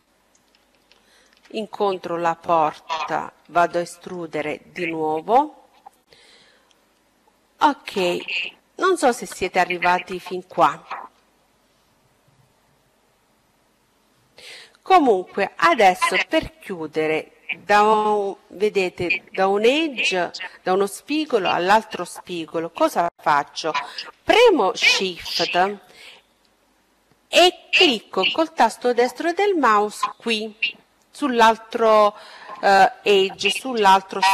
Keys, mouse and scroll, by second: 2.3 e, 4.0-5.9 drag, 8.0-10.7 middle drag, 26.4-28.3 right drag.